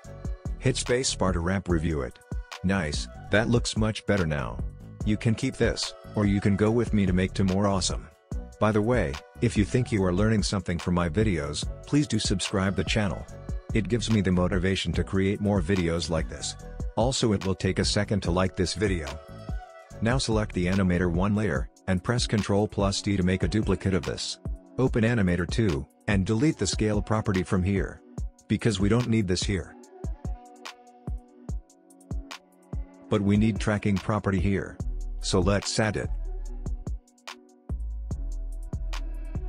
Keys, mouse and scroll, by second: 0.2 space, 1.7 click, 2.6 space, 4.1-7.4 drag, 7.4 space, 9.0-12.4 drag, 22.4 ctrl+d, 24.2 click, 27.6 click, 33.5 click.